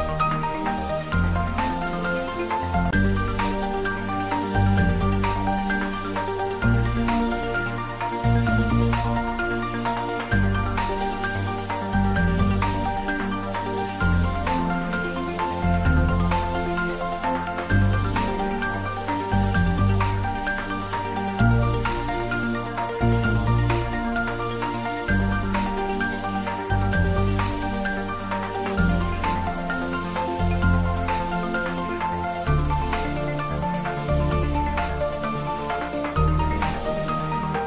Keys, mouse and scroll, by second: 1.8-2.2 scroll up 1, 4.8 click, 6.0 Tab, 6.4-7.5 scroll up 1, 7.5 click, 8.6 2, 9.0 click, 10.3 shift+click, 12.4-13.6 scroll down 2, 13.6 s, 17.7 click, 18.4 z, 21.2 scroll down 1, 22.0 z, 23.5-24.4 middle drag, 25.1 g, 25.7 x, 28.7 click, 29.2 shift+z, 29.7-30.3 scroll up 1, 30.3-31.2 middle drag, 31.8-32.8 scroll up 1, 32.8 s, 34.2 click, 34.9 g, 35.3 x, 36.4 BackSpace.